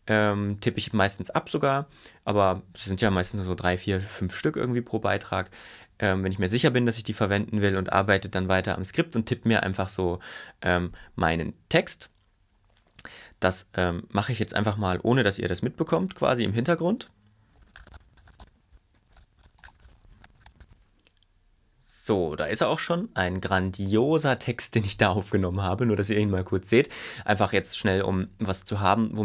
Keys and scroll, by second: 17.3-20.7 typing, 18.8 Return, 20.6 Tab, 20.9 Tab.